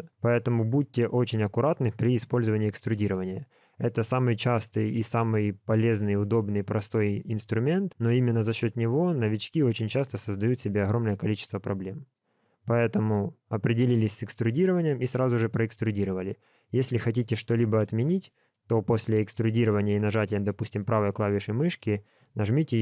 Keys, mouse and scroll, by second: 12.1 middle click, 17.7 KP_1, 18.7 e.